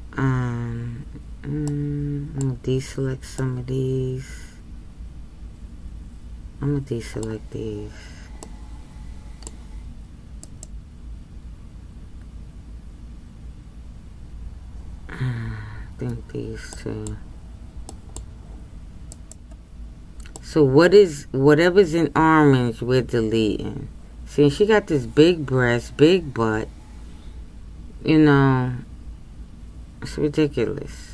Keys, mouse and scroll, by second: 20.5-23.3 middle drag.